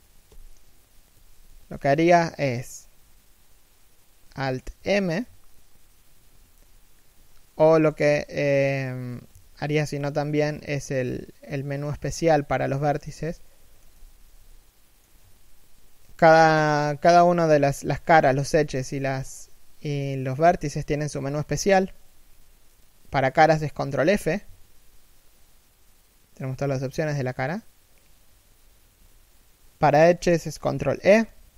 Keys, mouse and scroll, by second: 0.8 z, 4.4 alt+m, 7.5 ctrl+f, 9.1 ctrl+v, 11.8 shift+middle click, 13.7 z, 14.2 middle click, 23.8 ctrl+f, 30.5 ctrl+e.